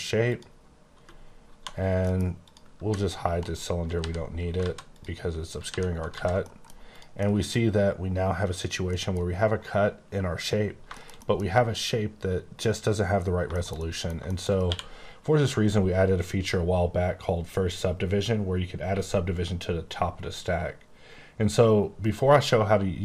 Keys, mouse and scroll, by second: 0.3 click, 0.9 _, 1.5 1, 2.0 middle click, 2.4 click, 2.8 typing, 3.4 right click, 3.9 h, 4.5 alt+z, 4.8 click, 5.6 h, 6.0 alt+z, 6.4 middle click, 6.8 click, 7.1 middle click, 8.8 middle click, 8.9 middle click, 9.2-10.1 scroll up 3, 10.6-10.9 scroll down 2, 10.9 shift+middle click, 13.0-13.3 scroll down 2, 13.4 shift+middle click, 14.6 q.